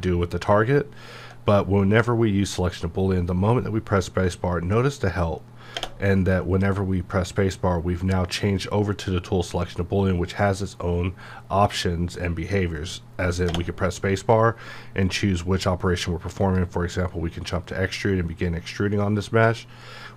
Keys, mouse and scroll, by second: 0.8-1.4 alt+scroll up 1, 16.4 click.